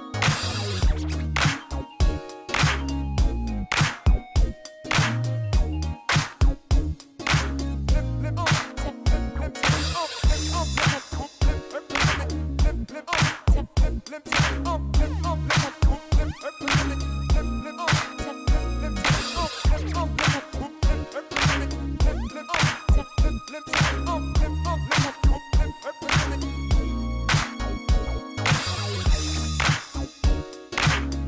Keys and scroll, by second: 0.1 g, 0.7 ctrl+r, 1.2 g, 1.9 g, 4.8 x, 6.6-8.8 typing, 7.5 Return, 10.2-15.3 typing, 17.6 shift+d, 18.8-21.1 typing, 23.0-26.4 typing, 26.1 Return, 28.1 s, 28.2 z, 28.3 0, 28.4 Return, 28.8 g, 30.0 g, 30.6 g.